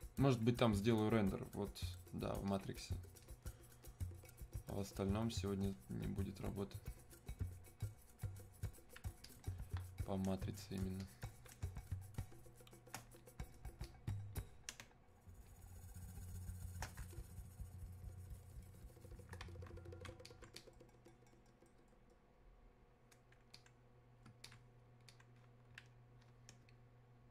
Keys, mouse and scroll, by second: 2.5-9.3 drag, 10.4 space, 11.0 alt+click, 11.7 space, 12.3 click, 12.4 space, 13.8 click, 14.8 space, 15.5 click, 15.6 space, 17.0 space, 17.2-26.7 shift+drag, 26.7 space.